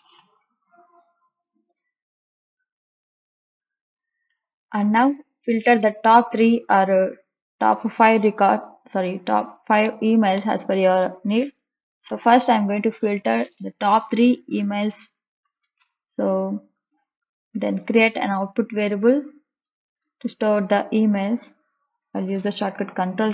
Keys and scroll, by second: 9.7 BackSpace, 12.0 3, 22.7 ctrl+k.